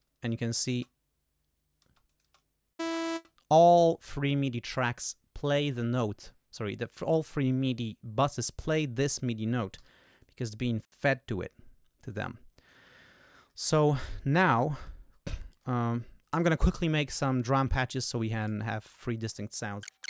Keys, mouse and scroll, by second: 0.3 click, 0.7 space, 1.8 space, 2.1 click, 3.1 space, 9.7 g, 10.2 click, 12.0 click, 13.0-13.3 ctrl+scroll up 2, 18.1 click, 19.9 shift+i, 19.9 shift+Return.